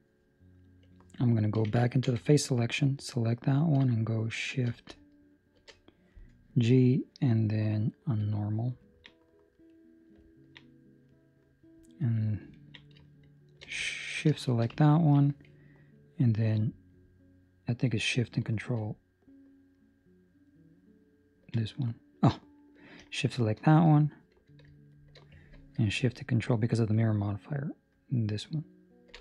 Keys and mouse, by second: 2.7 right click, 2.7 3, 5.5 shift+g, 8.7 ctrl+middle click, 9.0 middle click, 9.7 middle click, 10.0 ctrl+middle click, 10.2 ctrl+middle click, 10.6 middle click, 12.5 ctrl+middle click, 13.3 shift+right click, 14.5 shift+right click, 14.8 ctrl+middle click, 20.7 ctrl+shift+right click, 23.2 shift+right click, 25.1 shift+right click, 28.7 ctrl+shift+right click.